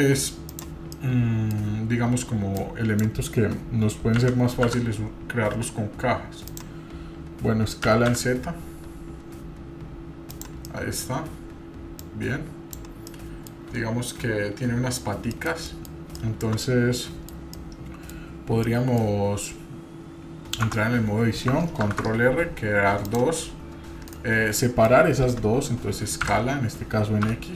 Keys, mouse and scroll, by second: 0.9 middle click, 2.5 click, 4.2 s, 10.6-11.1 middle drag, 12.0-12.7 drag, 13.1-13.4 middle drag, 15.3 middle click, 15.6 middle click, 16.1 shift+middle click, 16.6-17.3 middle drag, 17.5-18.1 middle drag, 18.7 middle click, 20.6 Tab, 21.8 ctrl+r, 24.5 ctrl+r, 24.6-25.0 middle drag, 26.2 s.